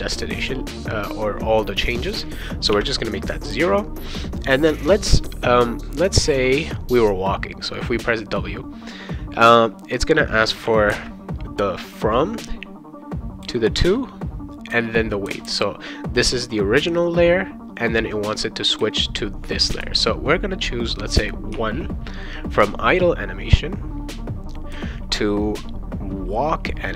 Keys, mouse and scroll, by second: 2.7 0, 10.6 ,, 21.5 1.